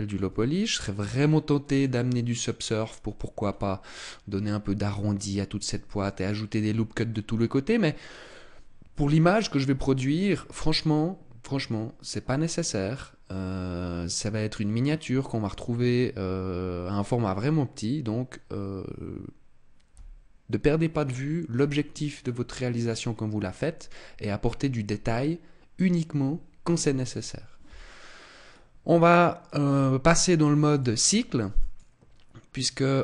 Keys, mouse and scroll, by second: 0.1 Tab, 0.7 middle click, 2.1 middle click, 3.3 scroll up 3, 5.9 shift+middle click, 6.9 middle click, 8.1 middle click, 9.4 middle click, 21.9-23.5 scroll down 1, 23.5 scroll down 1, 28.4-29.9 scroll down 3, 30.6 click.